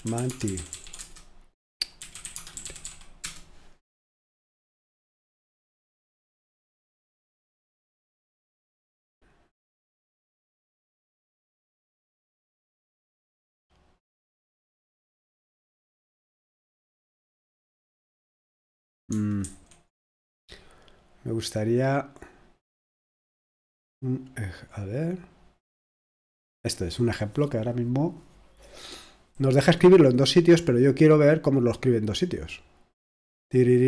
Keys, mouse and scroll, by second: 0.0-3.2 typing, 6.2-6.7 scroll down 1, 8.8-9.2 scroll down 1, 10.1-11.3 scroll down 1, 11.3-11.9 scroll up 1, 18.1-18.6 scroll down 1, 18.6-19.1 scroll up 1, 19.4 super+2, 22.0-28.7 drag, 31.2 click, 31.8-32.3 scroll down 1, 33.0-33.8 scroll down 2.